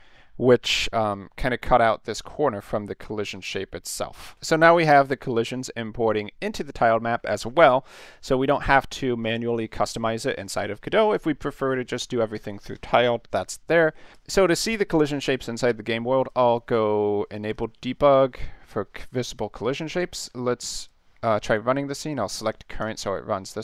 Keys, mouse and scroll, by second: 0.3 middle click, 14.1 click, 16.2 click, 17.5 click, 19.8 click, 20.8 click, 22.8 click.